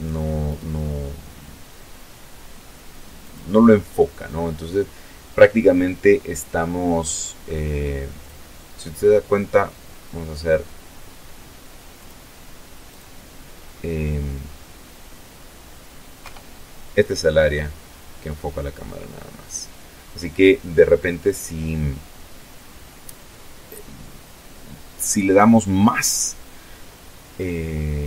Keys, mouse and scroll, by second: 1.4 click, 6.4 click, 10.1 click, 11.0 click, 14.4 KP_0, 15.6 scroll up 2, 26.7 click, 27.1-28.0 middle drag.